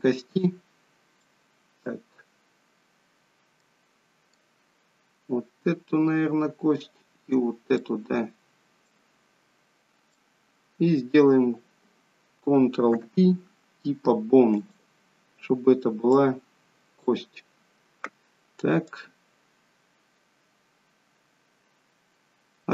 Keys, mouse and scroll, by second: 1.3 middle click, 2.4-3.6 scroll up 4, 3.6 middle click, 7.9 middle click, 9.6-10.2 scroll down 2, 10.5 middle click, 10.5-10.9 scroll down 1, 12.9 ctrl+p, 16.2 click, 17.5-18.2 scroll down 4, 19.1 click.